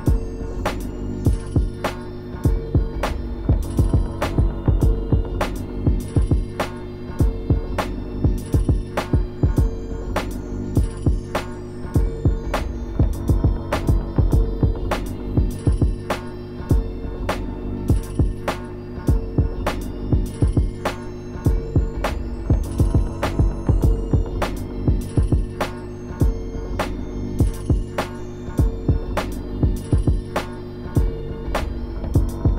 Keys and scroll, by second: 1.0 ctrl+z, 1.3 scroll down 1, 1.4 scroll up 1, 1.6 ctrl+z, 2.6-3.0 scroll up 2, 18.3 scroll down 1, 21.3 scroll up 1, 25.8 scroll down 1, 26.0 scroll up 1, 28.0 ctrl+z, 28.7-29.0 scroll up 2, 29.8 scroll down 1, 30.0 scroll up 1, 31.5 ctrl+z, 32.0-32.5 scroll up 3.